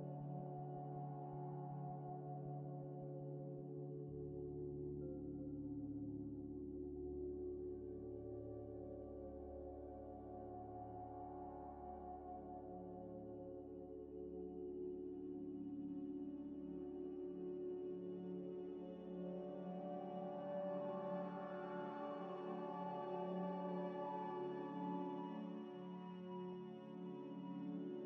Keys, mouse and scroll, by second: 0.0-0.9 typing, 1.9 s, 2.3 Tab, 3.7 3, 5.2 middle click, 5.8 e, 6.8 ctrl+z, 7.0 ctrl+z, 7.0 ctrl+z, 9.4 1, 11.1 middle click, 11.6 e, 13.3 Tab, 13.7 z, 13.9 middle click, 14.4 scroll down 1, 14.8 z, 15.9 z, 16.7 z, 17.2 Tab, 17.5 scroll, 17.6 scroll down 1, 17.9 scroll up 1, 18.5 middle click, 18.9 scroll down 1, 19.2 scroll up 1, 19.5-20.0 scroll down 1, 20.1 Tab, 20.5 shift+click, 20.8 scroll down 1, 21.5 shift+click, 22.0 shift+click, 22.0 shift+click, 23.5 middle click, 25.1 scroll up 1, 27.2 scroll down 1, 27.6 scroll up 1.